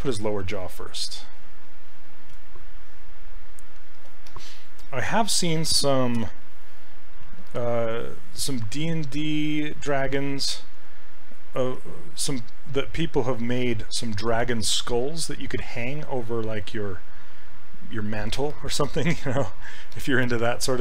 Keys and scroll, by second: 6.2 e.